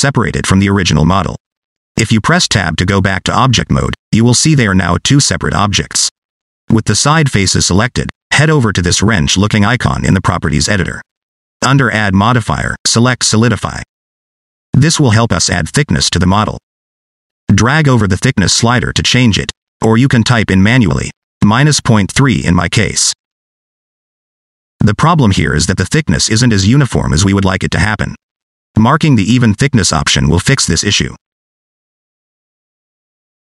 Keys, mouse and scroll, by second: 2.3 Tab, 3.9 click, 4.6 click, 5.9 click, 7.2 click, 11.1 click, 13.2 click, 16.0 middle click, 17.0 shift+middle click, 17.2 scroll up 2, 17.4 scroll down 1, 17.5 middle click, 18.6 click, 21.2 click, 25.4-27.3 typing, 25.9 click, 27.6 click, 29.0 d, 29.8 ctrl+z, 30.0 ctrl+z, 31.5 click.